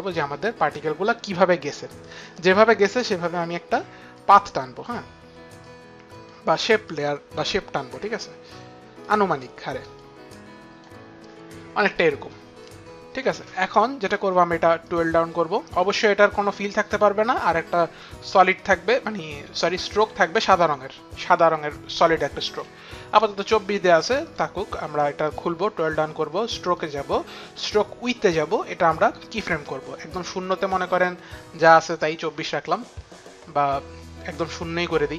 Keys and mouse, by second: 3.8 click, 5.3 click, 6.5 click, 7.8 click, 9.0 click, 9.9 click, 14.5 click, 23.9 click.